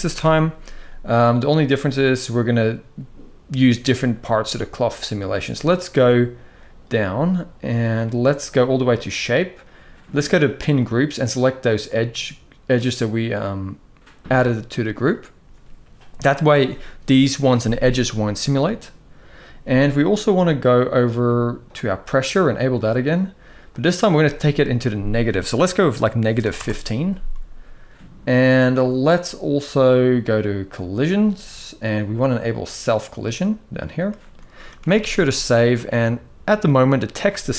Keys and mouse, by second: 10.5-14.8 drag, 16.9 middle drag, 23.4-26.3 drag, 30.7 click, 32.7 click, 34.3 ctrl+s, 34.6 ctrl+s, 34.8 ctrl+s, 35.0-35.6 middle drag, 36.4 middle drag, 37.4 KP_1.